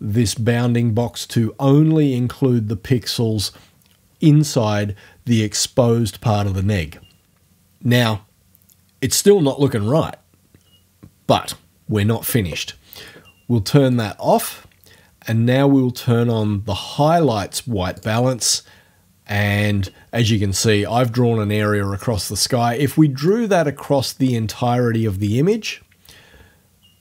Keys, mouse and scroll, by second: 14.0 click, 18.0 click, 23.3-25.7 drag.